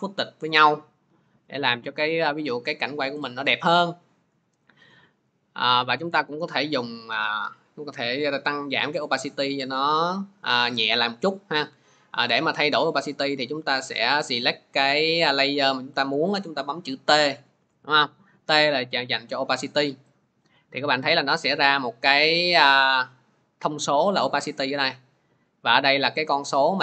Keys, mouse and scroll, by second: 0.3 click, 1.3 click, 3.1 click, 5.2 click, 14.2 click, 14.8 click, 16.9 t, 21.0 click, 22.4 click, 22.9 click.